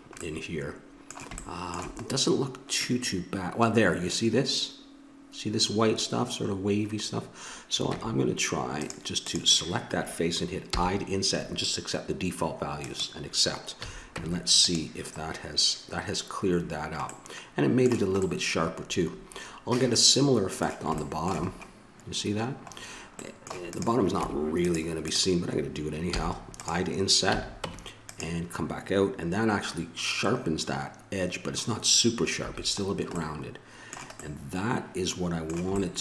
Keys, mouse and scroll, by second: 0.9-7.7 middle drag, 7.8 Tab, 9.2-11.1 right drag, 10.7 i, 13.8 a, 14.2 Tab, 15.2-16.5 middle drag, 18.9-19.9 middle drag, 21.0-24.2 middle drag, 24.2 Tab, 24.2-26.1 drag, 26.1 i, 27.3 a, 27.6 Tab, 32.4 a, 32.8-35.6 middle drag.